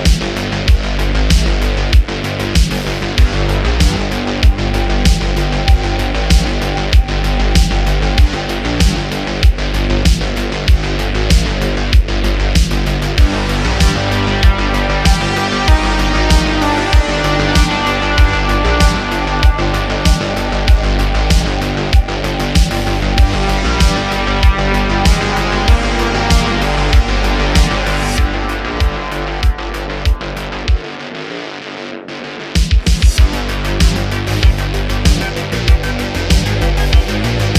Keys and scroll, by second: 0.3 3, 1.2 e, 2.1 3, 4.5 Tab, 8.6 super+s, 9.1 q, 16.5 shift+a, 17.4 s, 25.5 shift+d, 26.3 x, 28.6 ., 30.8 shift+d, 30.9 x, 31.1 x.